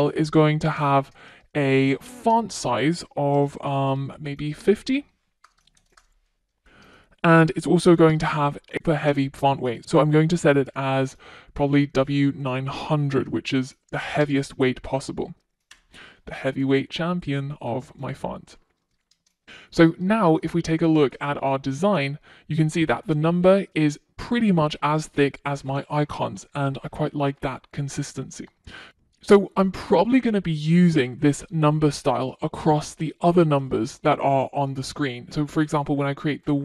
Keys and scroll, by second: 0.0 Return, 2.1 Return, 6.7 Return, 8.8 Return, 13.3 Return, 18.3 super+s, 20.5 super+s.